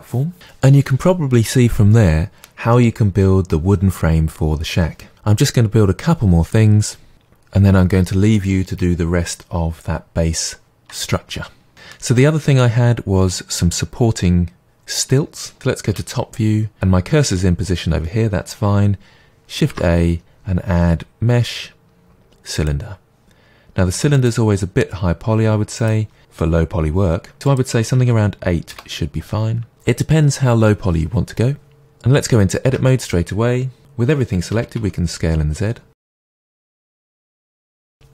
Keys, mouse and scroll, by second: 15.5 KP_7, 19.7 shift+a, 24.1 click, 25.8-31.8 drag, 28.8 Return, 31.8-36.4 middle drag, 32.7 Tab, 34.5 s, 36.4 click, 36.7 scroll down 1, 36.9 middle click, 37.3 s, 37.7 click, 37.9 KP_1.